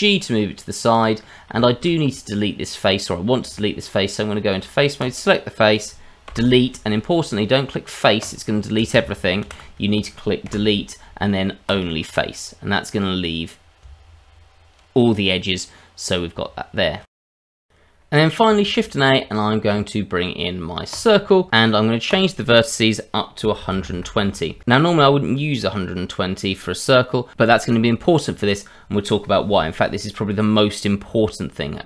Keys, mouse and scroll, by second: 1.2 middle click, 1.6 shift+middle click, 2.0-3.4 scroll up 2, 3.4 Tab, 5.0 click, 6.3 Delete, 9.4 ctrl+z, 10.5 Delete, 13.8 Tab, 14.8 click, 15.1 click, 16.5 Tab, 17.1 scroll down 2, 17.2 click, 17.4 shift+middle click, 17.5 middle click, 18.6 shift+a, 22.1 click.